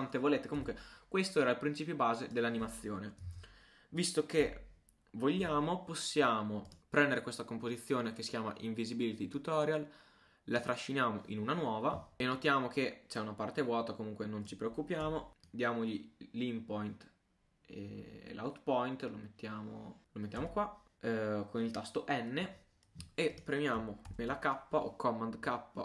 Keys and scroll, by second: 3.3 super+a, 24.1 super+k.